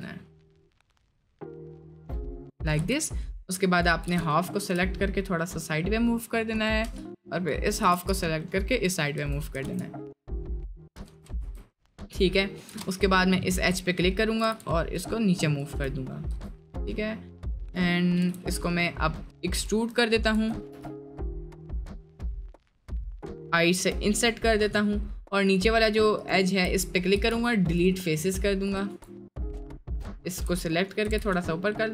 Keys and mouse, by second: 2.8 Tab, 3.4 click, 4.1 g, 7.1 click, 7.8 g, 9.2 Tab, 9.6 s, 11.1 Tab, 12.8 Tab, 12.8 click, 14.4 g, 16.0 middle click, 16.3 Tab, 16.6 middle click, 17.7 click, 18.2 g, 19.6 Tab, 20.3 a, 20.7 e, 21.8 middle click, 22.3 middle click, 23.7 i, 25.4 click, 26.2 alt+click, 27.2 x, 28.7 click, 28.9 Tab, 30.8 click, 31.3 shift+g.